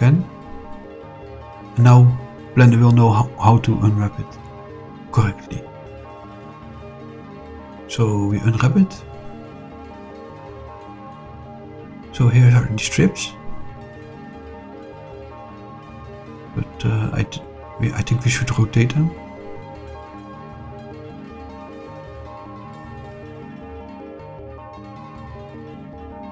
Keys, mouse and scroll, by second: 0.6 click, 1.3 click, 2.0 shift+click, 2.6-4.5 middle drag, 5.4 shift+click, 5.8 shift+click, 9.6 click, 10.0 click, 12.7 click, 19.7 click, 20.1 click, 22.1 r, 22.9 9, 23.1 0, 23.7 Return, 25.9 click.